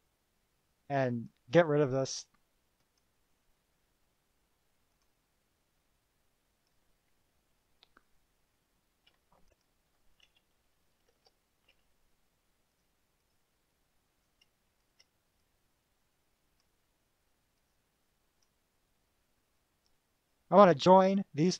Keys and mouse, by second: 1.3 click, 3.0 click, 5.1 click, 6.0-7.0 drag, 7.5 -, 8.5-9.5 drag, 9.6 click, 11.4 shift+p, 11.9 3, 12.9 click, 13.4 click, 14.3 click, 15.1 shift+click, 15.7-16.9 drag, 17.7 click, 18.6 click, 19.8-20.6 drag.